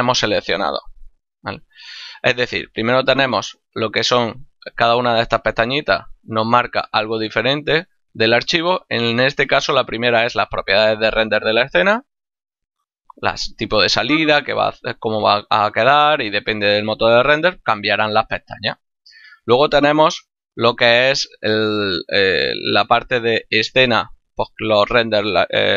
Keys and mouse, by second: 4.7 click, 12.9 click, 17.2 click, 19.7 click.